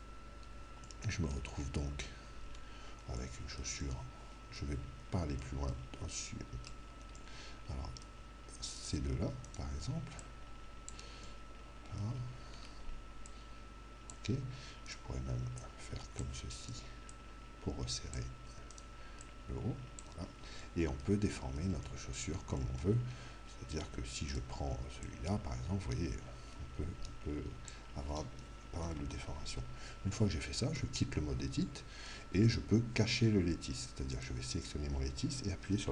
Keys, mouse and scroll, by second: 0.3-9.0 middle drag, 8.8-11.3 right drag, 10.2 click, 11.3-13.3 middle drag, 13.3 click, 14.1 middle click, 14.8-18.4 right drag, 15.6-18.9 drag, 18.8 right click, 19.3 click, 20.7-24.5 middle drag, 24.3 right click, 25.0 click, 28.9 ctrl+z, 30.8 Tab, 31.7-33.3 middle drag, 34.1 right click.